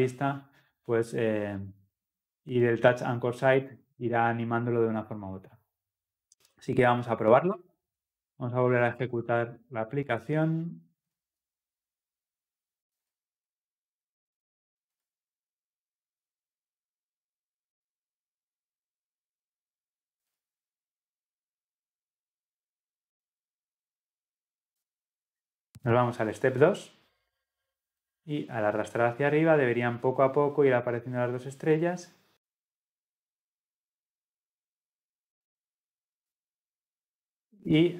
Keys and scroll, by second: 13.1 shift+F10.